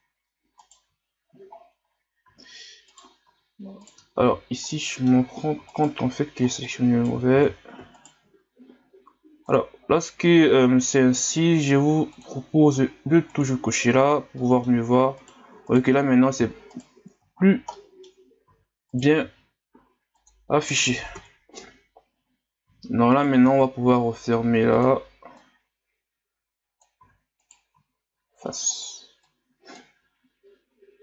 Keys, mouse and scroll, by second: 0.6 alt+right click, 2.4 e, 4.3 ctrl+z, 4.7 middle click, 5.7 alt+right click, 6.7 right click, 7.4 ctrl+z, 8.0 alt+right click, 9.4-13.4 drag, 14.4 middle click, 15.2 right click, 15.7 alt+right click, 16.7 right click, 17.4 scroll up 1, 17.7 middle click, 18.6 e, 21.1 KP_Divide, 22.8 e, 25.4 click, 27.1 e, 29.3 click, 30.0 s.